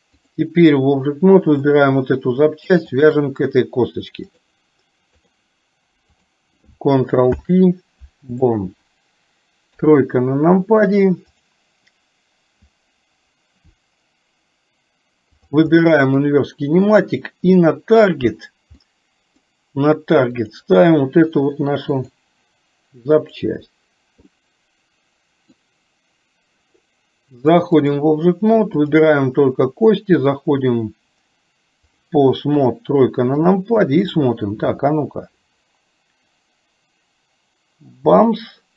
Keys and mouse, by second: 0.2 click, 1.6 click, 4.4-5.5 drag, 7.4 ctrl+p, 9.7 KP_3, 15.5 click, 15.7 middle click, 18.9 middle click, 20.4 click, 22.0 click, 24.4-25.5 middle drag, 27.6 click, 28.9 click, 30.2-32.0 drag, 32.6 KP_3, 34.7 r.